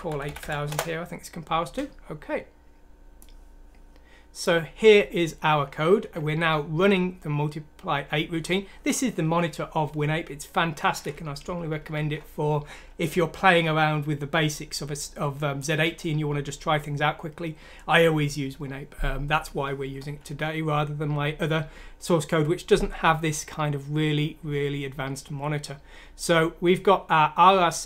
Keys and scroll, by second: 0.0-1.2 typing, 20.0 F7.